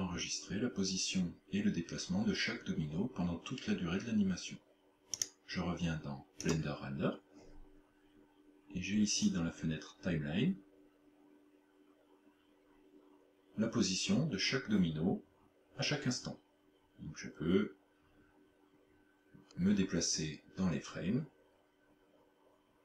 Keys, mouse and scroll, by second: 5.2 click, 9.3 click.